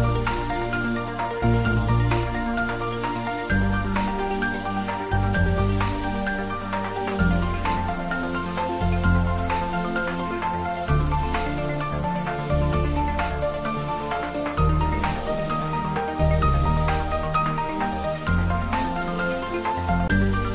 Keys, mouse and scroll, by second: 0.3 click, 0.8-2.9 scroll down 1, 2.9 click, 4.8 Tab, 5.0 scroll down 1, 6.2 scroll up 1, 6.7-8.8 middle drag, 9.5 click, 10.1 Tab, 10.6 click, 11.0 Tab, 11.3 click, 11.8 Tab, 12.5 click, 13.0 Tab, 13.5 click, 14.1 Tab, 15.5 click, 16.2 Tab, 16.7 scroll up 1, 17.4 click, 19.9 click.